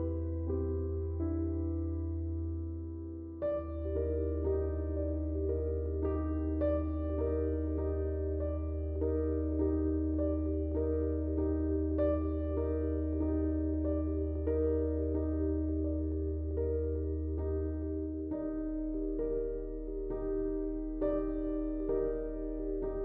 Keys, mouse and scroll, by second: 12.7 ctrl+z, 12.9 click, 14.4-18.6 typing, 19.4 click, 19.5 click, 21.1-23.0 shift+drag.